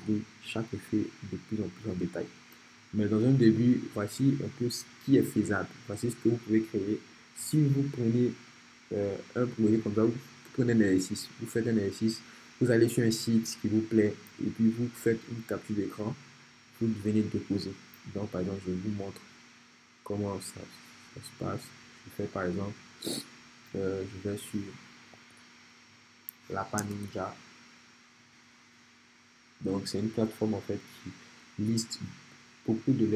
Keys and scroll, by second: 24.9-25.7 typing, 26.8 Return.